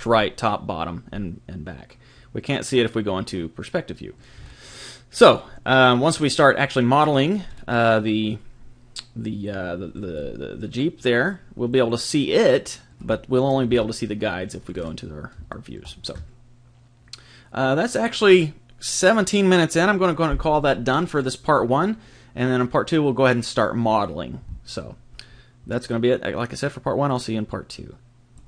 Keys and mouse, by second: 2.5-11.6 middle drag, 7.7 typing, 12.4-14.6 middle drag, 13.7 KP_1, 15.5 middle click, 16.6 middle click.